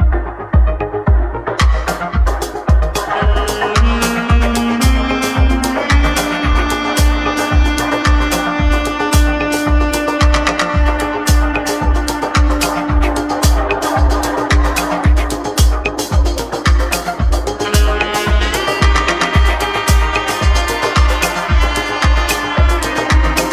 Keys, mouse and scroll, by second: 0.7 shift+s, 20.7-23.5 middle drag.